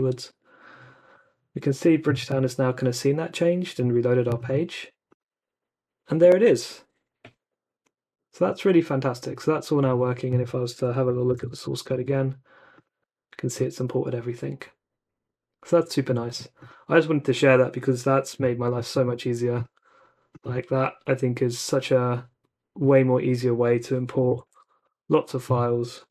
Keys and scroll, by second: 11.2 alt+super+u, 11.8 super+r, 24.1 ,, 24.4 shift+n, 25.7-26.1 typing.